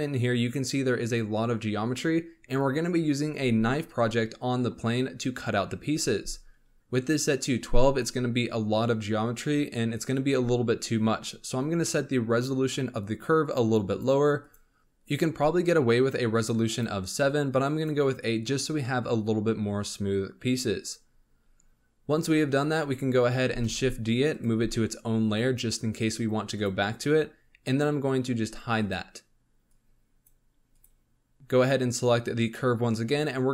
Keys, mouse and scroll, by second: 13.4-14.8 drag, 16.3 click, 16.6-20.8 drag, 20.9-21.7 scroll down 13, 22.3 scroll up 1, 23.5 shift+d, 24.5 m, 28.8 click, 29.6 click, 30.7 click.